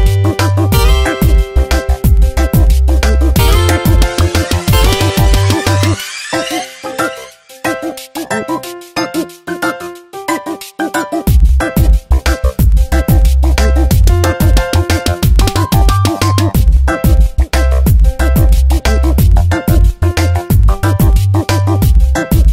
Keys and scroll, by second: 10.9 Return, 11.6 ctrl+t, 13.1 Return, 13.5 2, 15.1 ctrl+z, 20.8 Return, 21.7 v.